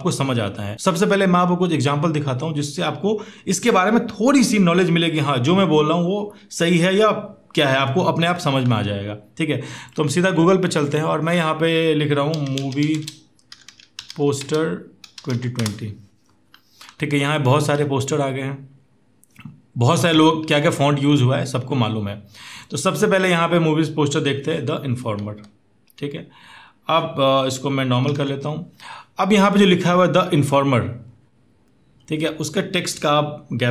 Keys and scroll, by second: 12.5-15.3 typing, 27.8 ctrl+0.